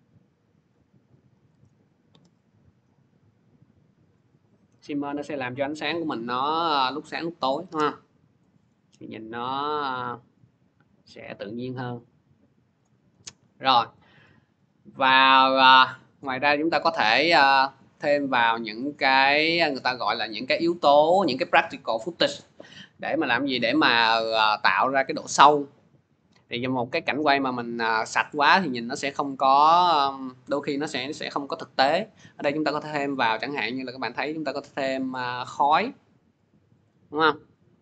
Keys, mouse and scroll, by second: 1.5 click, 7.8-8.3 scroll, 8.5-9.2 scroll, 12.6 click, 12.7 scroll, 14.1 scroll, 15.4 click, 16.0 click, 16.1 click, 17.6 middle click, 18.3 click, 19.1 middle click, 19.1 middle click, 19.2 middle click, 19.6 middle click, 24.6 middle click, 24.7-28.5 drag, 28.5-29.6 middle drag, 29.6 scroll, 32.0 click, 32.2 click, 36.7 click.